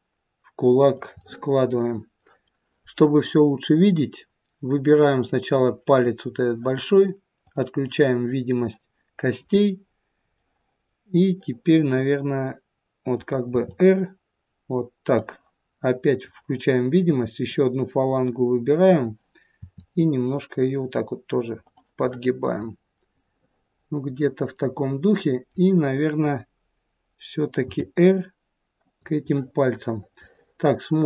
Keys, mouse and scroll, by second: 1.1 middle click, 5.1 click, 7.4 click, 10.3 middle click, 13.5 r, 16.0 click, 17.4 click, 18.9 click, 19.6 r, 22.1 middle click, 23.5 middle click, 24.6 middle click, 27.6 r, 29.2 middle click.